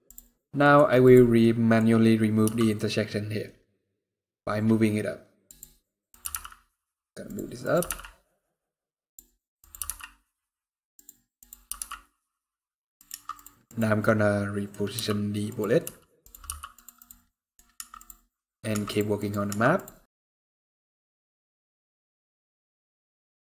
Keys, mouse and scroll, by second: 0.4 click, 0.4 scroll down 2, 0.8 click, 1.1 middle click, 2.2 g, 5.8 click, 6.0 g, 7.4 click, 7.5 g, 9.3 click, 9.5 g, 11.1 click, 11.4 g, 12.8 Tab, 13.4 click, 13.8 middle click, 14.7 g, 15.6 r, 16.2 g, 16.7 click, 17.0 middle click, 17.8 Tab, 17.8-18.4 scroll down 1, 18.8 Tab, 19.6 Tab, 20.1 click, 20.5 ctrl+click, 20.6 middle click, 20.7 g, 21.6 scroll down 4, 21.8 shift+scroll up 3, 21.8 shift+middle click, 22.3 click, 22.9 ctrl+click, 23.1 g.